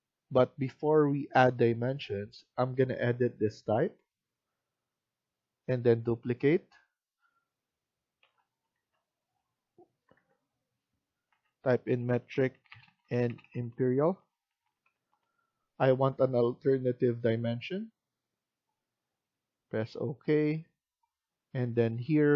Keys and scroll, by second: 8.1-15.5 typing.